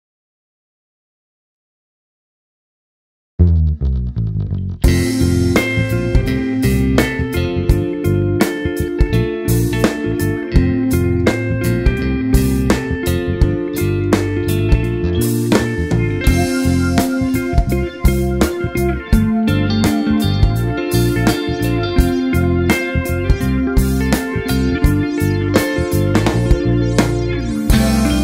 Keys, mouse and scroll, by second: 0.1 KP_1, 0.6-1.3 scroll up 1, 1.3 z, 3.9 click, 7.0-8.8 drag, 7.0 z, 7.2 `, 7.7-8.1 scroll down 2, 8.1 alt+a, 8.5 `, 11.6-16.9 drag, 16.9 `, 17.7 click, 20.2 ctrl+a, 22.0 click, 23.3 scroll down 1, 25.1 click, 25.4-25.9 scroll up 1, 26.8 click.